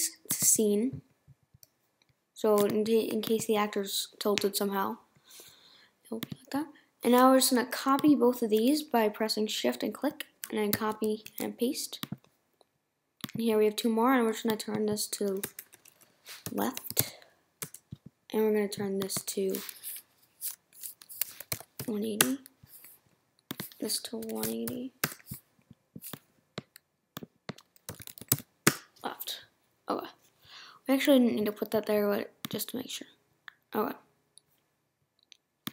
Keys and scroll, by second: 15.4 BackSpace, 21.0-22.0 typing, 25.0 Return, 29.6 Return.